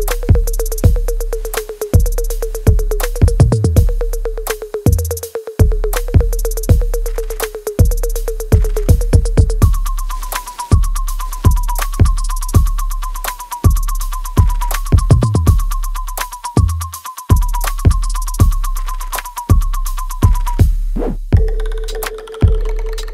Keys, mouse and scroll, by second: 5.2 ctrl+z, 10.1 alt+click, 11.2 right click, 12.1 z, 17.1 alt+right click, 17.6 alt+click, 18.5-22.6 alt+middle drag.